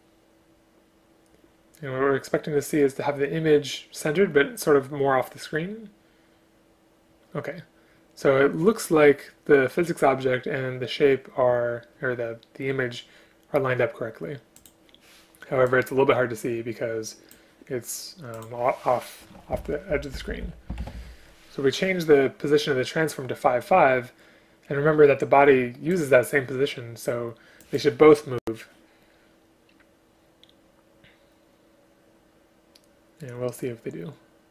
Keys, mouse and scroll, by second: 19.6 shift+Left, 20.2 Right, 20.3 Right, 20.5 Right.